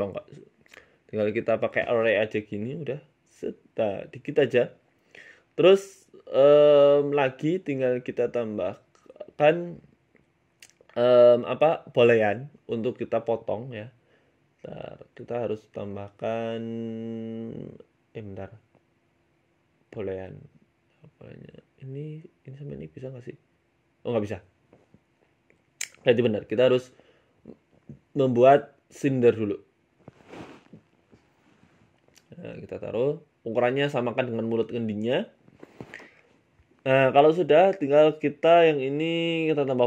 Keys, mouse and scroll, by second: 4.0 middle click, 4.5 middle click, 4.7-5.1 scroll up 3, 5.1 shift+middle click, 5.3 shift+middle click, 7.9 middle click, 10.2 g, 12.7 shift+middle click, 13.2 right click, 14.6 right click, 15.2 click, 19.9 click, 20.7 click, 22.1 middle click, 22.7 right click, 23.9 click, 25.2 click, 25.8 ctrl+z, 26.9 ctrl+z, 27.7 ctrl+z, 28.2 ctrl+z, 28.7 middle click, 28.9 shift+a, 30.3 middle click, 30.6-31.4 scroll down 10, 31.4 g, 32.2 s, 33.0 middle click, 33.3-33.9 scroll up 9, 33.7 s, 36.4 middle click, 37.0 right click, 37.6 right click, 39.6 click.